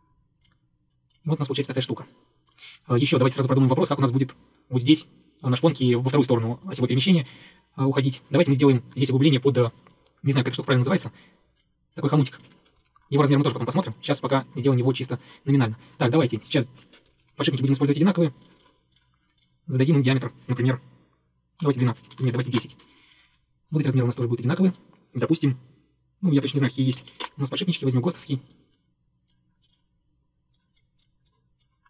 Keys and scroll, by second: 2.7 Escape, 2.8 Escape, 12.8 Escape, 12.9 Escape, 14.7 Escape, 17.2 Escape, 17.2 Escape, 17.3 Escape, 21.4-23.0 typing, 27.0 1, 27.3 Return, 27.3 2, 28.1 Escape, 28.2 Escape.